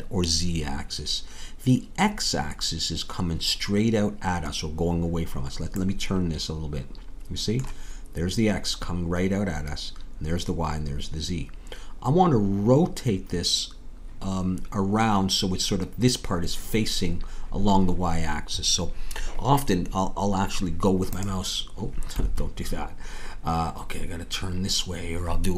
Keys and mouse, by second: 21.1-23.1 drag.